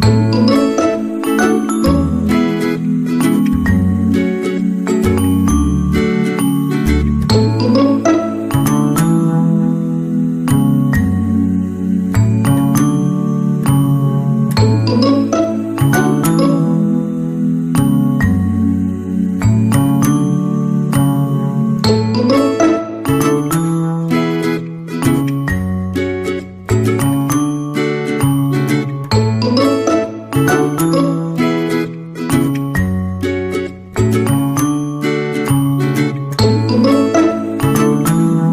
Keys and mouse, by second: 0.9 c, 1.6 g, 2.7 alt+z, 3.1 right click, 3.4 g, 4.5 g, 6.9 g, 8.1 right click, 8.3 g, 9.5 KP_1, 10.2 Tab, 10.8 middle click, 12.0 middle click, 12.3 Tab, 13.3 middle click, 14.3 alt+click, 14.6 middle click, 17.5 KP_3, 18.3 right click, 19.3 g, 20.5 Tab, 20.9-21.5 middle drag, 21.8-22.9 middle drag, 23.2 middle drag, 23.7 KP_3, 24.3-24.7 shift+middle drag, 25.2 Tab, 25.6 alt+z, 26.2 right click, 26.9 right click, 27.2 g, 28.8 alt+z, 29.1 Tab, 29.8-31.9 middle drag, 32.4 middle click, 33.3 shift+middle click, 34.0 shift+middle click, 34.7-35.1 middle drag, 35.4 KP_1, 35.8-37.3 shift+middle drag, 38.1-38.5 shift+middle drag.